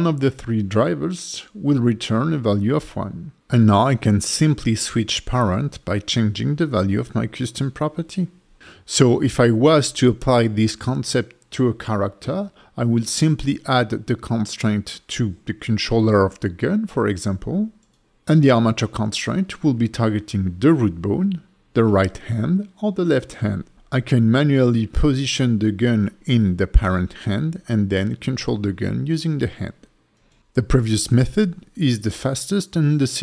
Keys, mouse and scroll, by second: 0.4 click, 2.4 click, 3.5 click, 4.1 click, 5.8 click, 6.4 g, 7.0 right click, 7.5 click, 8.0 g.